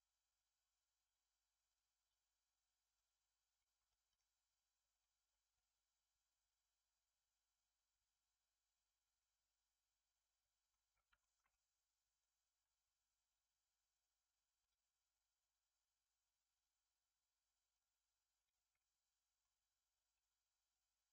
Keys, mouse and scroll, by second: 0.2-3.2 drag, 3.5-4.0 middle drag, 4.0 right click, 5.2 scroll up 1, 5.5-8.5 middle drag, 10.8-11.1 scroll down 4, 11.1 right click, 11.4-12.2 middle drag, 12.2-13.2 scroll up 2, 14.7-16.2 drag, 16.5 click, 17.6-18.4 drag, 18.7-20.1 middle drag, 20.1-21.1 shift+drag.